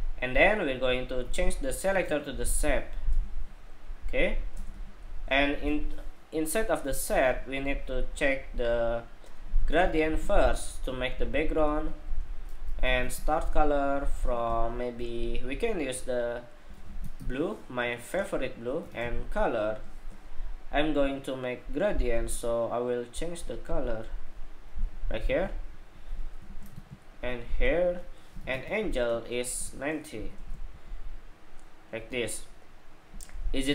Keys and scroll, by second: 25.0 super+c, 25.8 super+c, 27.8 super+v.